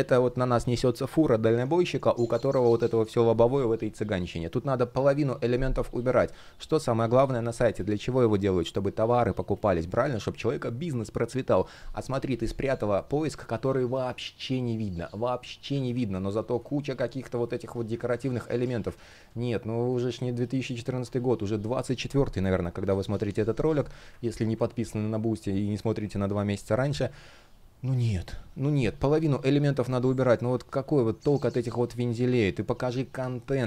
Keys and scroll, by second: 15.4 super+z, 17.6 super+z, 20.5 Delete, 24.0 super+z, 33.1 shift+p.